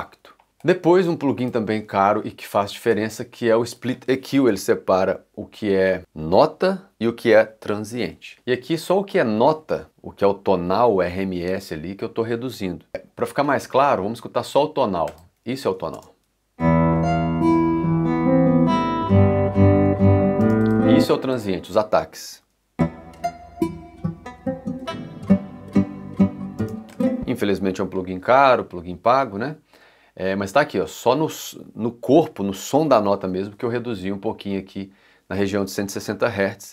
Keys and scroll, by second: 15.9 space, 20.4 space, 22.2 space, 26.6 space.